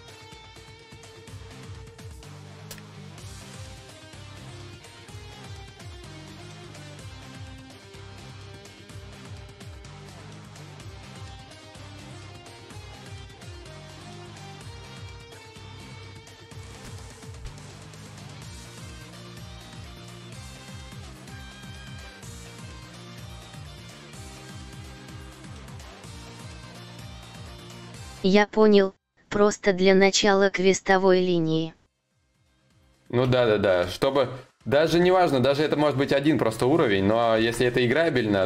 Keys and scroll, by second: 30.9 ctrl+z, 34.5 ctrl+z, 34.5 y.